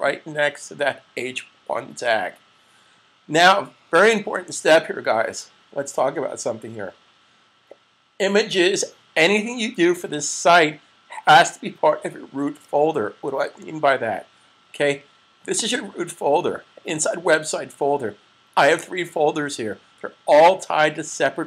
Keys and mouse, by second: 13.0 shift+super+s, 15.5 click.